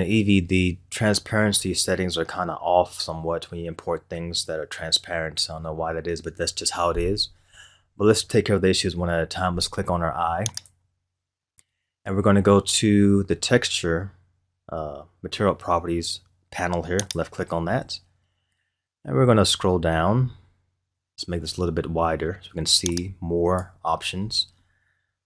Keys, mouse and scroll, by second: 10.5 click, 12.6 scroll down 2, 17.1 click, 18.8-20.3 scroll down 17, 22.9-23.9 drag, 23.9-25.2 scroll down 12.